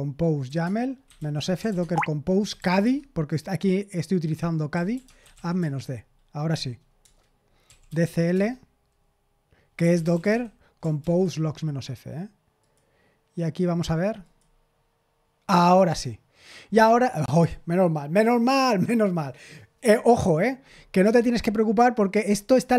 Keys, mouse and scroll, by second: 0.0-3.4 typing, 4.4-5.8 typing, 7.0 Return, 7.4-8.5 typing, 9.5-11.5 typing, 11.0 ctrl+c, 12.6 click, 14.2 click, 22.0 click, 22.5-22.7 typing.